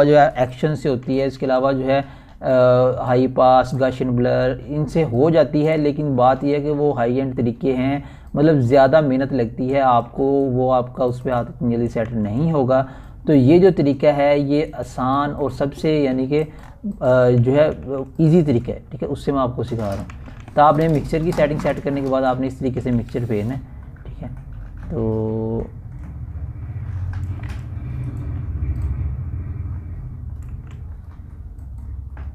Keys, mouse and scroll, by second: 2.7 scroll up 1, 3.7 typing, 4.2-6.5 drag, 6.5 scroll up 1, 6.8 [, 7.1-8.9 drag, 8.9 ], 9.2-12.4 drag, 12.4 [, 12.7 click, 12.7 [, 14.8 ], 15.0 click, 15.0-18.1 drag, 18.1 [, 18.2 click, 19.3 scroll up 1, 19.9-20.5 typing, 20.7-22.8 drag, 22.8-25.6 typing, 23.3 click, 24.2 click, 25.2 click, 25.7-29.9 drag, 29.9 typing, 30.3-32.3 drag.